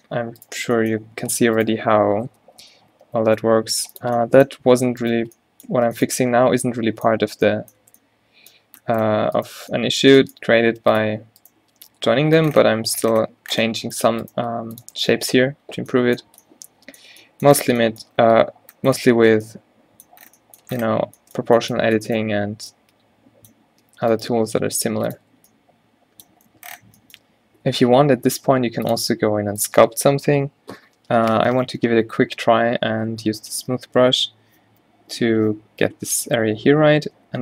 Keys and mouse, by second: 1.5 Tab, 2.6 o, 3.1 g, 8.0 Tab, 9.0 Tab, 10.8 g, 11.7 g, 14.5 g, 15.1 Tab, 22.1 Tab, 23.9 Tab, 24.2 Tab, 24.6 g, 25.4 Tab, 26.0-26.7 middle drag, 28.1 ctrl+z, 29.9 ctrl+z, 33.4 f, 37.3 click.